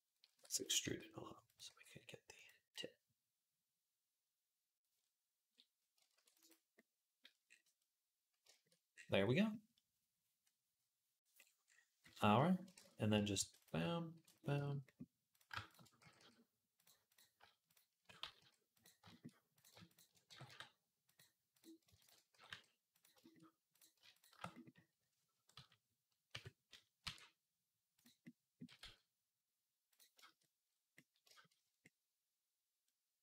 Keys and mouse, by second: 0.3 e, 0.5-3.2 middle drag, 0.6 s, 1.5 g, 3.2-8.3 drag, 6.0 ctrl+r, 12.6 shift+Tab, 13.2 ctrl+r, 13.6-15.1 ctrl+middle drag, 13.9 ctrl+r, 15.1 click, 15.2-16.9 middle drag, 15.3 shift+a, 15.8 g, 16.9 click, 17.0-21.3 middle drag, 17.2 shift+a, 18.0 g, 19.6 shift+a, 20.1 g, 21.3 click, 21.4 middle click, 21.7 shift+a, 21.8 click, 21.9-25.4 middle drag, 22.1 g, 23.8 shift+a, 25.3 KP_1, 25.4-29.1 drag, 26.1 KP_3, 26.8 e, 28.5 g, 29.1 middle click, 29.9 shift+click, 30.0-31.1 shift+middle drag, 31.1 shift+click, 31.2-33.2 middle drag.